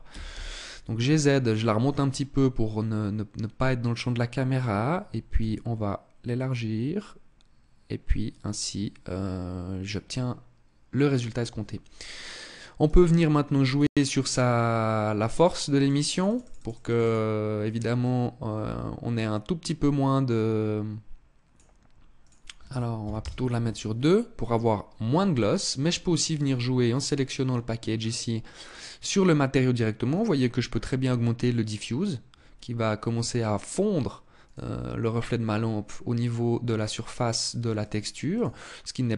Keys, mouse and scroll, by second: 1.0 click, 4.8 s, 6.1 click, 11.6 right click, 12.4 right click, 13.2 right click, 14.8 click, 15.2 click, 15.4 click, 15.6 click, 15.7 click, 15.9 click, 16.0 click, 16.2 click, 16.4 click, 16.5 click, 17.5 click, 21.7 click, 25.8 right click, 27.4-27.8 scroll down 3, 29.6 click, 33.9 click, 37.3 click, 37.8 click.